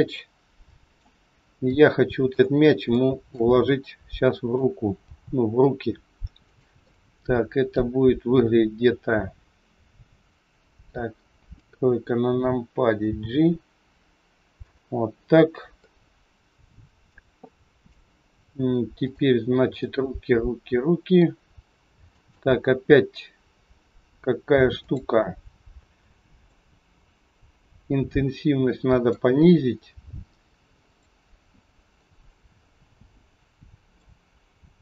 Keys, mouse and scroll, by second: 0.2 middle click, 1.7 shift+middle click, 2.5 scroll up 3, 2.9 shift+middle click, 3.9 middle click, 5.0 g, 6.9 middle click, 8.0 scroll down 3, 11.5 KP_3, 13.0 g, 15.2-15.8 scroll up 4, 15.8 middle click, 17.4 shift+middle click, 18.9 click, 19.8 middle click, 24.8 click, 30.8 click, 32.3 scroll down 5, 33.8 scroll down 10, 33.9 click.